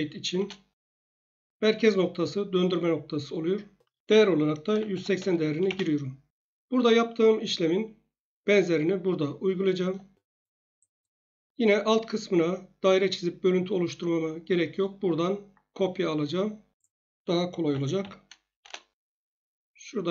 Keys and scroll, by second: 0.3 Return, 4.4-5.2 typing, 5.6 Return, 17.4-18.5 typing, 18.6 Return.